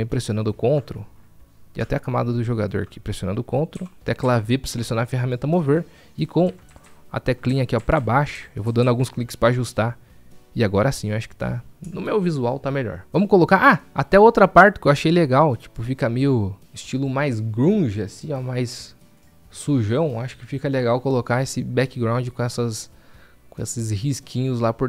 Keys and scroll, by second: 4.6 v, 8.1 v.